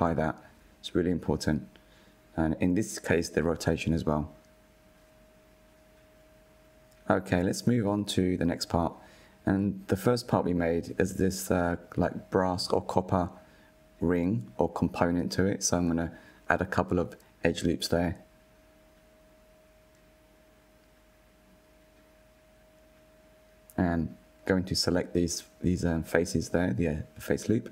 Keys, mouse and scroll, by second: 1.7 ctrl+a, 3.1 click, 3.9 click, 4.4 click, 5.4 scroll down 3, 5.8 scroll up 2, 6.0 click, 7.5 click, 9.6 Tab, 10.0 scroll up 4, 10.6-11.4 shift+middle drag, 11.4-13.3 scroll up 3, 13.3 ctrl+r, 16.8 ctrl+r, 19.8-20.7 scroll down 4, 20.8-22.3 middle drag, 22.3-22.9 drag, 22.9-24.3 shift+middle drag, 23.9 scroll, 24.5 3, 25.5 alt+click, 27.1 scroll down 1.